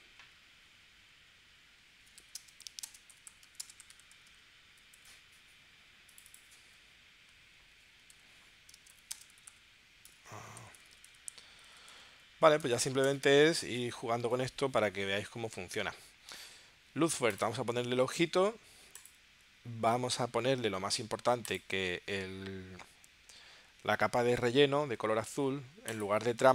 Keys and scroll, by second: 0.0 BackSpace, 2.2-4.3 typing, 4.9 Return, 8.2-12.7 typing, 13.1 Return.